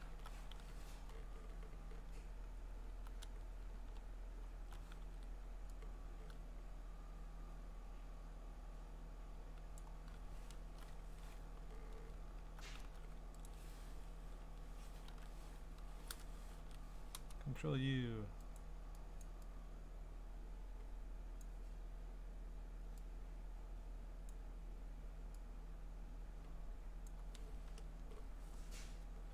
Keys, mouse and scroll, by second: 0.0 alt+BackSpace, 0.6 ctrl+d, 1.5-2.0 scroll, 2.6 scroll, 3.2 ctrl+z, 3.7 ctrl+z, 4.5-4.8 scroll, 5.0 ctrl+d, 9.8 click, 10.6 alt+BackSpace, 11.0 ctrl+d, 11.6-12.1 scroll, 12.9 v, 13.5 ctrl+click, 15.1 ctrl+i, 15.9 Escape, 16.5 ctrl+u, 18.6 click, 19.2 click, 21.4 click, 24.3 click, 27.1 click, 27.9 Return.